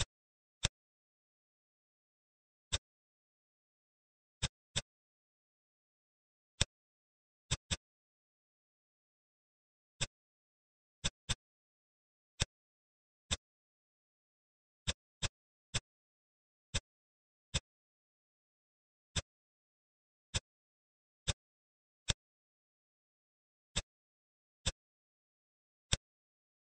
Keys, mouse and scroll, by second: 2.5 click, 3.4-3.9 scroll down 2, 3.9 Tab, 4.2 click, 4.5-6.0 middle drag, 6.0-6.4 scroll down 6, 6.4 middle click, 7.0 ctrl+s, 7.3 click, 7.5-9.0 middle drag, 9.8 click, 10.2-10.8 scroll down 4, 10.8 click, 11.1 drag, 11.4-12.3 scroll down 11, 12.3-13.1 middle drag, 13.1 click, 13.7 s, 15.2 click, 15.6 click, 16.5 click, 17.3 middle click, 17.7 scroll down 2, 18.0-19.0 middle drag, 19.0 click, 20.1 click, 21.1 click, 21.8-23.4 middle drag, 23.5 click, 24.4 click, 24.7-25.7 middle drag, 25.7 click, 26.3 shift+d.